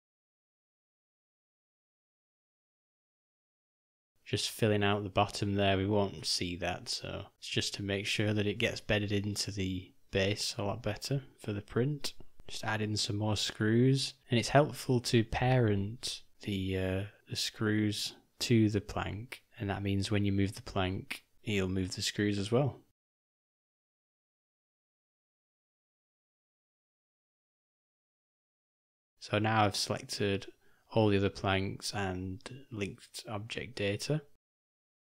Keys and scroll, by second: 5.2 o, 9.6 alt+d, 12.4 r, 16.3 alt+d, 17.8 s, 19.8 u, 26.4 u, 32.5 g.